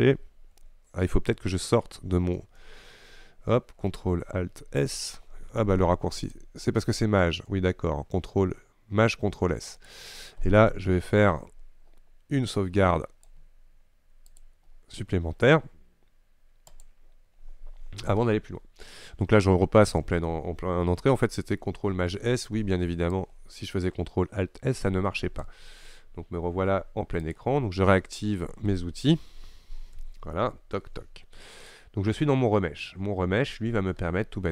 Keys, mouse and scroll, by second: 2.4 ctrl+alt+space, 20.1 ctrl+alt+space, 22.0 ctrl+shift+s, 28.8 n, 30.0 t.